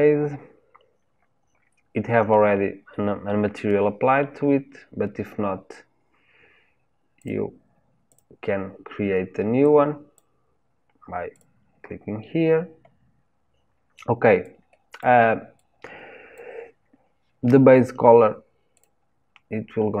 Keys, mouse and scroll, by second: 8.2-10.4 drag, 11.4 click.